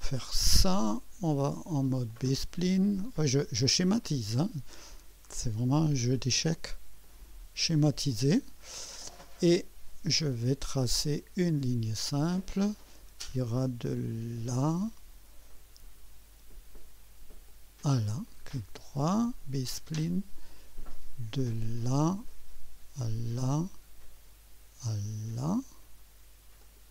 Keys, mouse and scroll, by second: 0.2 right click, 2.1 click, 3.8 click, 4.9 click, 7.0 click, 7.7 right click, 12.2 click, 14.6 click, 17.5 click, 18.3 middle click, 20.0 click, 21.8 click, 23.4 click, 26.6 click.